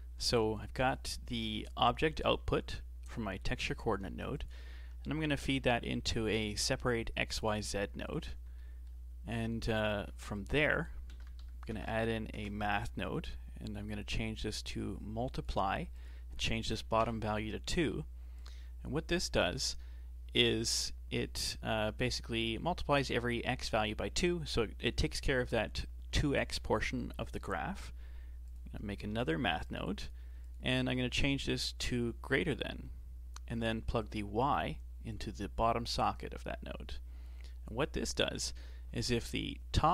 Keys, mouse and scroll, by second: 4.1 shift+a, 8.6-10.1 shift+middle drag, 10.1 shift+a, 14.4-21.4 drag, 28.5 click, 29.1 shift+d, 30.4-33.4 drag, 34.0 click.